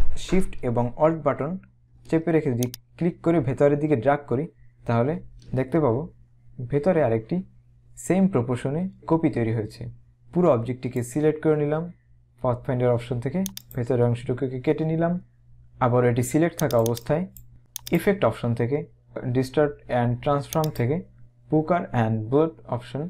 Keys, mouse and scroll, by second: 10.1 click, 13.6 click, 16.8 click, 17.9 click, 20.7 click.